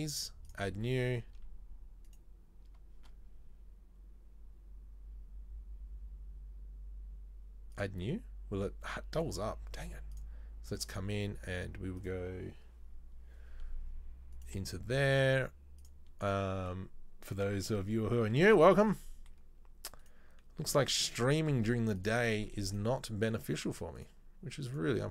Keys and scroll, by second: 20.7 z, 21.7 z.